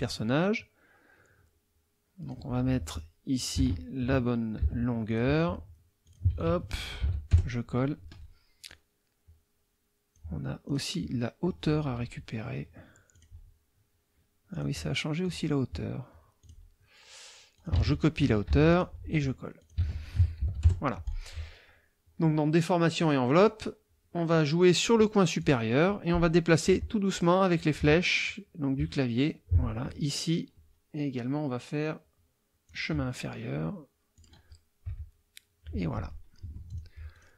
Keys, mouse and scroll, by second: 2.2 click, 3.3 ctrl+click, 3.6 ctrl+a, 4.6 ctrl+c, 5.1 ctrl+click, 6.0 ctrl+click, 6.3 ctrl+a, 7.0 ctrl+v, 7.3 ctrl+KP_Enter, 8.7-10.3 drag, 10.7 click, 11.1 click, 13.1 click, 14.5 click, 15.2 click, 16.4 click, 17.5 ctrl+click, 17.8 ctrl+a, 18.5 ctrl+c, 18.7 ctrl+click, 19.6 ctrl+click, 19.9 ctrl+a, 20.4 ctrl+v, 20.6 ctrl+KP_Enter, 23.3 click, 25.4 click, 26.7 Left, 27.8 Right, 28.8 Right, 32.7 click, 34.1 click, 34.9 Right, 36.4 F1, 36.7 click, 37.1 click.